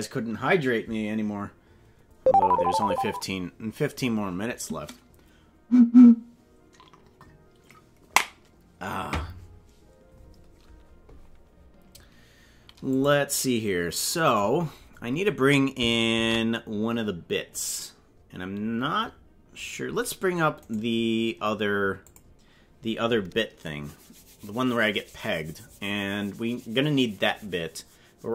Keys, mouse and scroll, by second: 12.9 click, 14.5-15.2 scroll down 7, 16.2 ctrl+s.